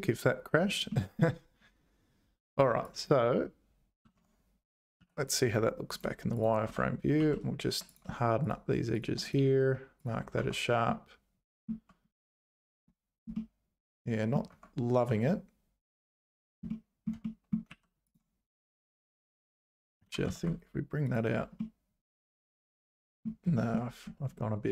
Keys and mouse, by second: 0.9 shift+middle click, 2.6 1, 2.9 click, 4.2 Tab, 5.0 z, 6.7 Tab, 7.2 2, 7.9 click, 9.3 right click, 10.4 Tab, 11.1 middle click, 12.7 click, 13.3-14.3 middle drag, 14.5 Tab, 15.9 click, 16.7 click, 17.2 click, 17.7 2, 20.0 g, 21.7-23.2 middle drag, 23.6 shift+middle click.